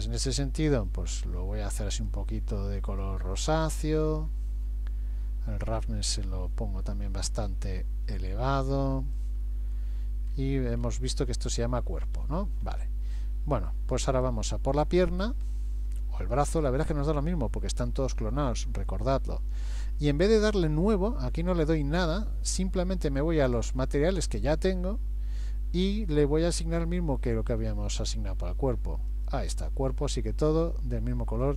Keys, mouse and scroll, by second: 0.0 click, 4.3-5.3 scroll down 3, 5.7 click, 5.7-6.6 scroll down 1, 10.3-11.9 scroll up 5, 14.1 click, 16.4 click, 23.4 click, 30.6 middle click, 31.4 scroll down 2.